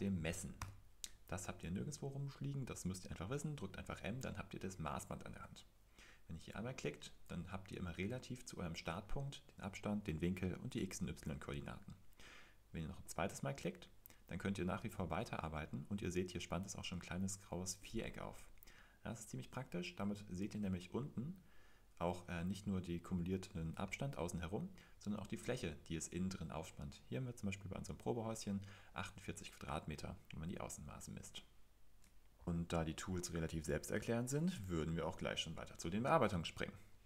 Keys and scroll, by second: 0.6 typing, 4.5-5.2 typing, 17.3-18.0 typing, 24.8-25.5 typing.